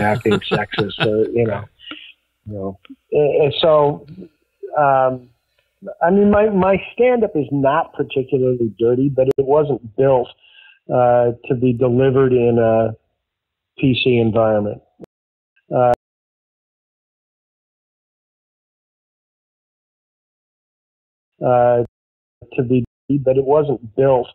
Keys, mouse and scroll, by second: 7.8-9.0 drag, 9.2 Delete, 10.3 click, 11.2 click, 11.9-13.5 drag, 13.7 click, 14.9 space, 15.4 click, 15.5 space, 15.8 click, 17.4 click, 17.8 click, 20.0-21.2 drag, 21.2 space, 22.0 ctrl+shift+Delete, 22.3 space, 22.7 space, 22.9 click, 23.0 space.